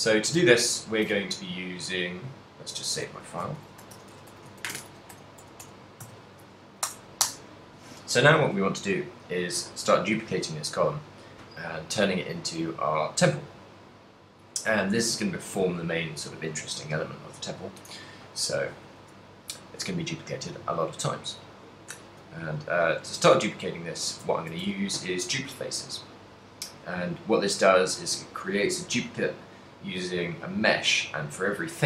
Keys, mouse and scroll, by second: 0.0 middle click, 7.4 Return, 9.8 middle click, 19.2 middle click, 21.8 right click, 22.7 KP_3, 24.3 a, 26.2 middle click.